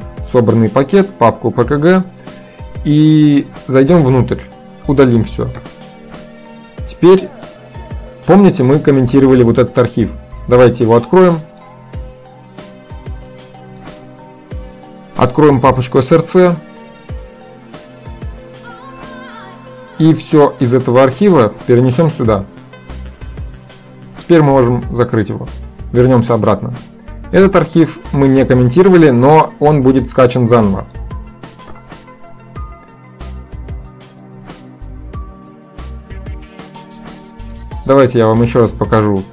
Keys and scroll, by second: 2.1 shift+Delete, 5.0 ctrl+a, 5.6 Delete, 31.8 shift+Delete.